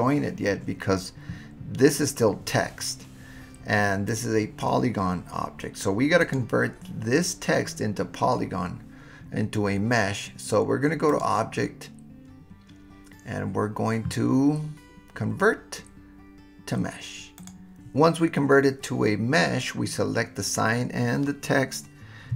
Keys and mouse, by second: 4.1 click, 6.2 click, 11.1-17.5 drag.